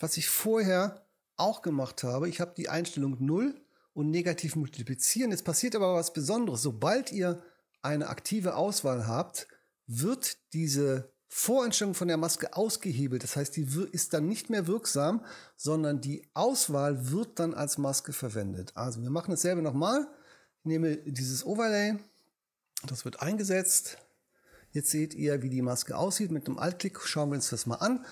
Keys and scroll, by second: 0.6 h.